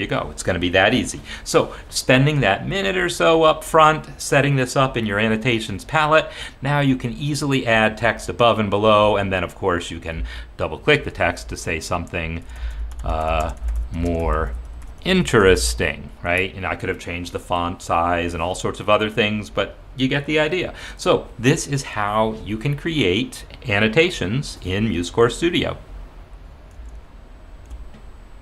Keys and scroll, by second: 11.1 ctrl+a, 12.2-16.6 typing, 27.7 shift+super+z.